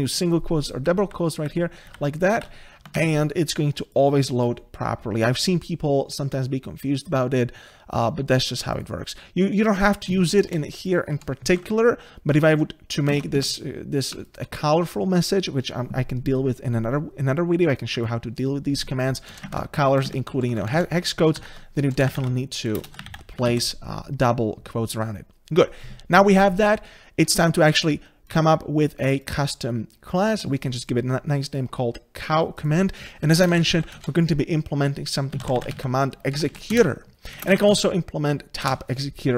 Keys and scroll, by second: 0.8 ctrl+z, 1.8 ctrl+z, 2.4 ctrl+z, 2.9 ctrl+z, 6.9 ctrl+s, 21.2 ctrl+z, 27.5 ctrl+s, 34.0 Return.